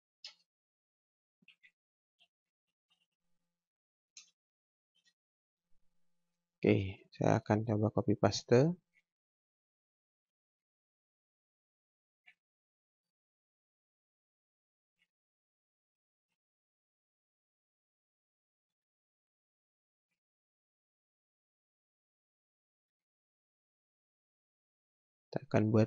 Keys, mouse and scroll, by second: 0.2 space, 1.2-5.1 typing, 5.7-6.1 scroll down 1, 6.1-6.6 scroll up 1, 6.6 space, 6.9 click, 8.9 ctrl+c, 9.3 click, 10.2 ctrl+v, 10.9 click, 12.3 t, 13.0 click, 15.0 ctrl+c, 15.5 click, 16.3 ctrl+v, 18.9-19.3 scroll down 1, 19.3-19.7 scroll up 1, 19.9 ctrl+v, 23.1-23.5 scroll down 1, 23.6 ctrl+v.